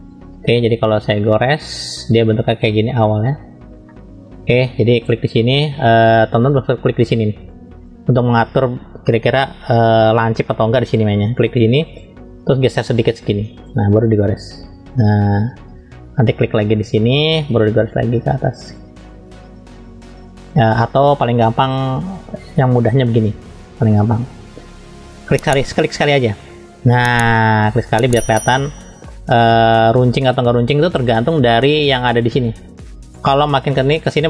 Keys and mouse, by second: 1.3 click, 2.9 middle click, 3.9 shift+middle click, 4.1 shift+click, 5.1-13.9 drag, 14.4-15.4 drag, 16.9-18.8 drag, 19.3-20.3 drag, 22.0 ctrl+z, 22.2 ctrl+z, 22.6 ctrl+z, 22.9 ctrl+z, 23.3 ctrl+z, 27.6 middle click, 28.6 shift+middle click, 29.7 shift+middle click, 31.8-34.2 drag.